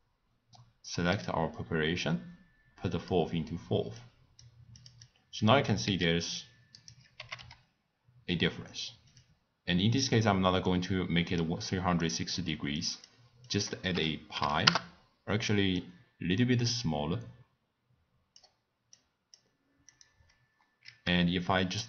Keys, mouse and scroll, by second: 1.1-4.0 drag, 4.8 click, 5.0 click, 5.8 s, 7.2 g, 10.6-12.0 middle drag, 12.0 click, 12.4 click, 12.8-18.8 drag, 18.9 click, 19.9 click.